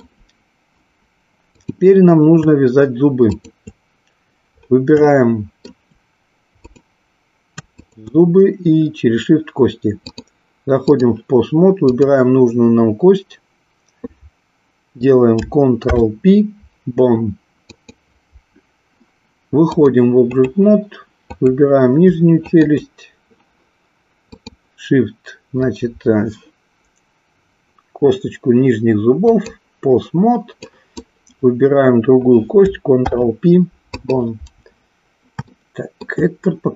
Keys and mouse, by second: 1.5 click, 3.2 shift+click, 5.1-5.8 shift+middle drag, 6.8 click, 7.6 shift+click, 10.1 click, 15.8 ctrl+p, 19.7-20.6 drag, 21.2 click, 22.5 shift+click, 24.3-29.6 drag, 30.7 click, 32.9 ctrl+p, 35.5-36.1 shift+middle drag.